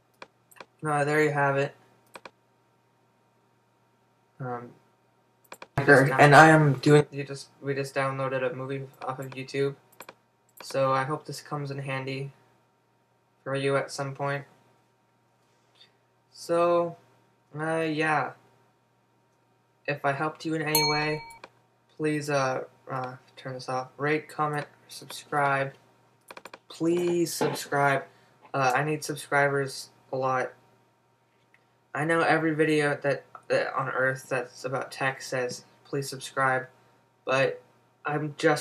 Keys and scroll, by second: 17.9 super+w.